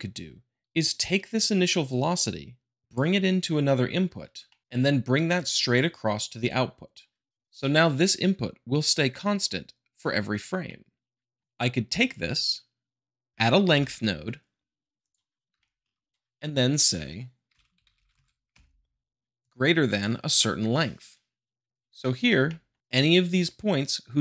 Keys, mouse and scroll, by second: 1.9-2.8 drag, 4.5 shift+middle click, 5.3-6.4 drag, 7.4 middle click, 10.0-10.5 middle drag, 10.6 shift+middle click, 12.0-13.1 drag, 13.3 h, 13.7 Return, 15.0 click, 15.6-16.1 shift+middle drag, 16.1-16.5 drag, 17.4-18.1 typing, 18.5 Return, 19.3 drag, 21.6 middle click, 22.4 shift+middle click, 22.8-23.2 drag.